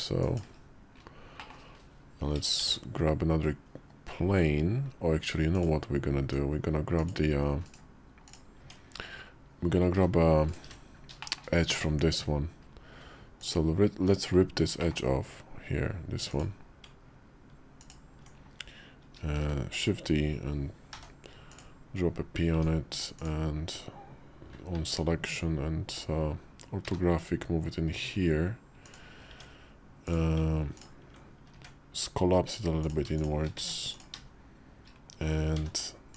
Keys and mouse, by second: 1.2 middle click, 2.5 shift+a, 5.5 click, 6.0 Tab, 6.8 click, 8.2 click, 8.5 Tab, 9.8 b, 10.5 n, 11.1 shift+middle click, 11.6 Tab, 13.2 alt+click, 14.7 middle click, 17.6 ctrl+click, 19.3 shift+d, 20.8 p, 22.4 Tab, 24.6 `, 25.5 KP_5, 26.7 g, 29.1 Tab, 29.9 click, 30.6 ctrl+click, 31.4 1, 33.1 shift+click, 33.4 1, 33.8 click, 35.4 e.